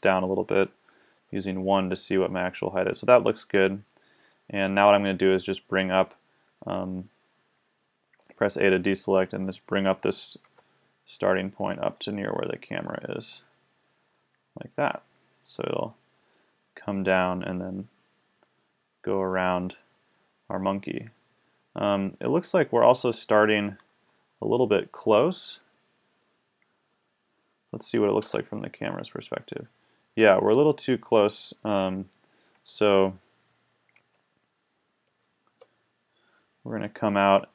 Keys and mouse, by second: 1.1 KP_1, 8.1 a, 10.4 KP_1, 15.3 middle click, 27.0 middle click, 28.2 KP_0, 34.0 Escape, 35.4 KP_1, 36.6 middle click.